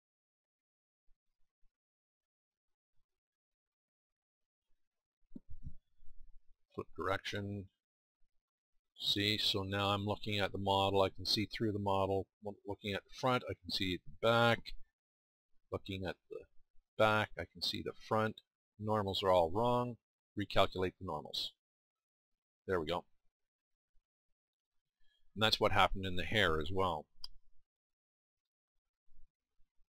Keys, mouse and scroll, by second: 3.5 middle click, 24.2-26.5 middle drag, 27.1 Tab.